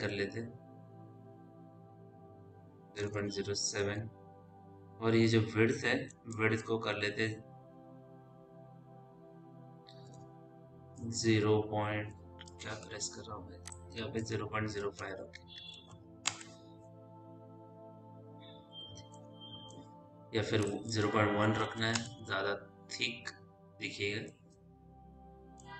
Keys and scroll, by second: 2.7 Tab, 2.7 KP_0, 3.0 ., 3.4 KP_0, 3.6 KP_7, 3.8 Tab, 6.8 shift+Tab, 10.1 BackSpace, 10.8 =, 12.3 BackSpace, 14.7 KP_0, 14.9 KP_Decimal, 15.4 KP_0, 15.8 KP_5, 16.1 Return, 21.6 KP_1, 21.8 Return.